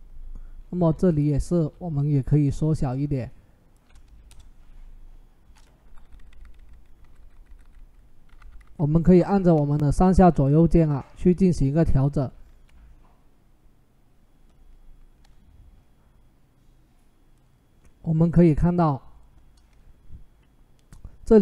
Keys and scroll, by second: 1.4 ctrl+t, 4.1 Return, 5.6 Up, 5.8-8.4 typing.